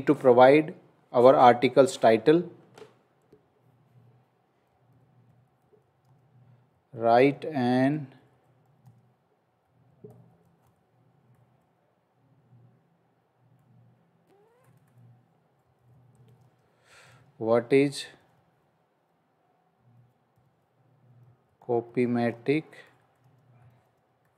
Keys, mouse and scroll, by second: 7.4 space, 10.2 t, 11.6 7, 11.7 BackSpace, 13.5 BackSpace, 15.5-19.7 typing, 20.9-24.3 typing.